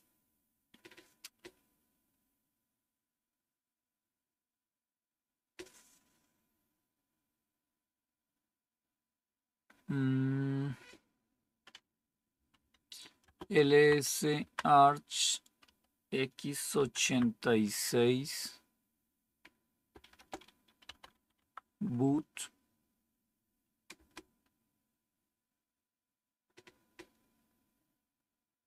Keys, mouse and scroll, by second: 12.2-14.3 typing, 15.3-16.0 typing, 16.9 Tab, 20.2-21.5 typing, 23.8 Return.